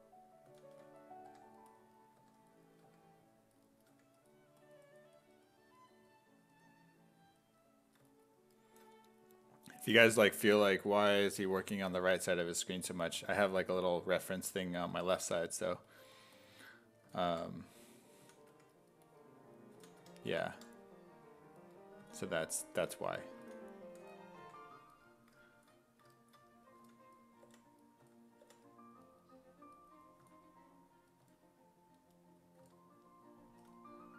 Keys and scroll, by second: 0.5 s, 0.8 1, 2.2 1, 2.9 1, 3.9 1, 12.3 1, 14.9 1, 17.1-24.4 typing, 26.8 s, 27.5 5, 28.0 s, 28.5 5, 30.2 s, 31.2 s, 32.6 s, 33.5 s.